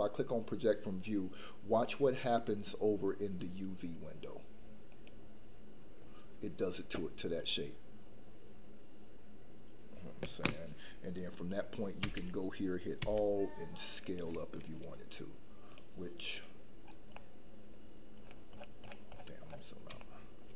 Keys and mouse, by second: 12.0 a, 12.9 s, 15.6-16.4 drag, 17.1-17.7 middle drag, 20.0 shift+middle drag.